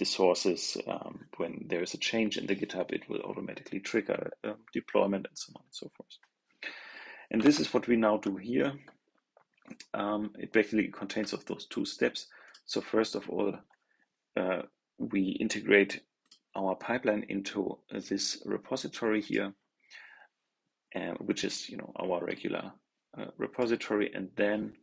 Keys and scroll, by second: 7.3 super+Tab.